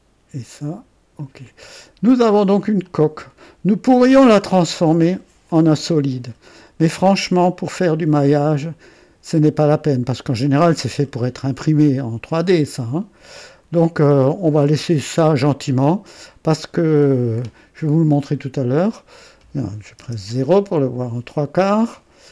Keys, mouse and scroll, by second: 1.2 click, 1.8-2.5 scroll down 2, 2.8-5.3 drag, 5.5-17.6 drag, 18.7 click, 20.0 KP_0, 20.4 right click, 21.5 scroll down 1.